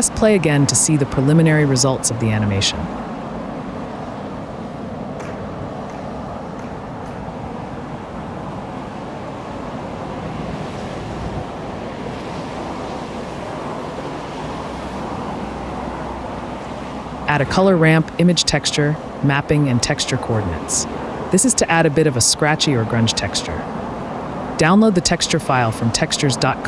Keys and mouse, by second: 0.6 space, 1.9 click, 3.3-3.7 space, 4.3 click, 8.6 click, 10.9 space, 13.4 space, 13.9 click, 14.2 space, 18.0 ctrl+z, 18.0 ctrl+a, 21.6 click, 23.1 ctrl+t.